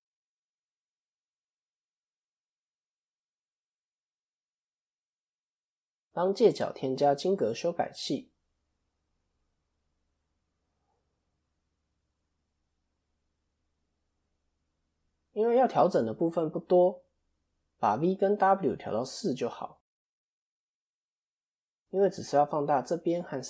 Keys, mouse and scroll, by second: 0.4 s, 4.4 KP_7, 5.2 KP_3, 5.4 KP_1, 5.9 click, 12.6 click, 12.6 KP_3, 13.9 click.